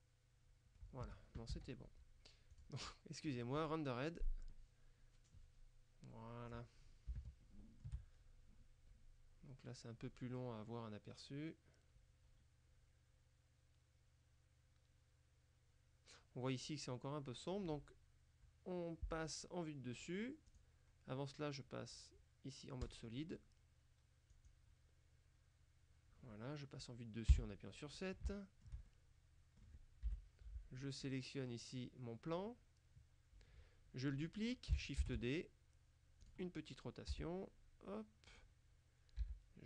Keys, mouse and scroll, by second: 1.1 Escape, 2.6 click, 3.7 click, 6.4-7.2 scroll up 2, 7.2 shift+click, 7.4 shift+middle click, 20.6 click, 22.9 click, 24.4 click, 27.4 KP_7, 28.4 shift+middle click, 30.1 KP_7, 31.1 right click, 35.1 shift+d, 36.3 click, 36.3-36.8 scroll up 2, 37.2 r, 38.4 click, 39.3 g.